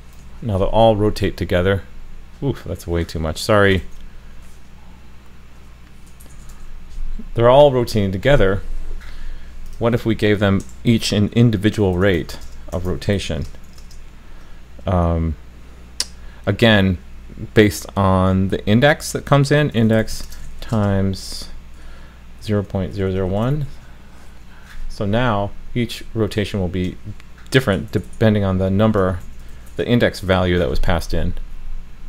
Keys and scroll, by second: 0.3 super+s, 3.8 super+s, 6.5 super+s, 30.4 super+s.